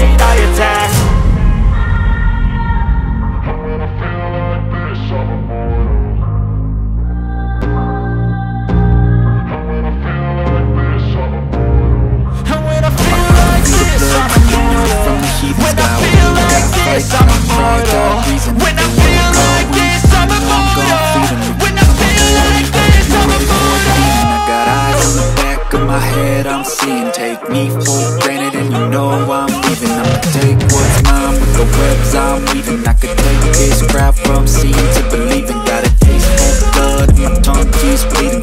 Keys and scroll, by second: 0.2 F3, 3.5 F4, 4.4 F2, 6.8 F3, 7.7 ctrl+r, 8.7 ctrl+r, 9.2 F3, 9.7 Escape, 10.5 shift+Page_Up, 11.4 F2, 16.8 space, 17.4 c, 17.6 e, 17.8 Escape, 20.3 Delete, 25.6 space, 26.4 c, 26.5 e, 26.8 Escape, 34.9 F3, 37.7 Escape, 38.1 F2.